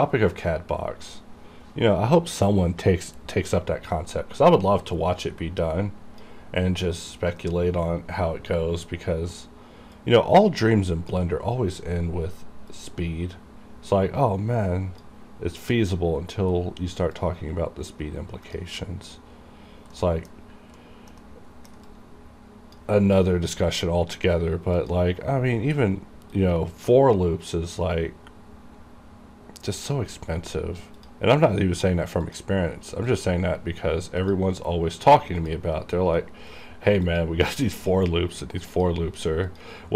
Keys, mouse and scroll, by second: 5.7-8.6 drag, 10.1-12.8 drag, 12.8-16.7 drag, 16.7-17.3 scroll up 1, 17.3-18.9 drag, 18.9 middle click, 19.3-19.9 scroll up 1, 20.1 middle click, 20.4 scroll up 1, 20.9 middle click, 21.3 middle click, 22.0-24.9 drag, 25.8-26.4 scroll down 1, 26.4-31.1 drag.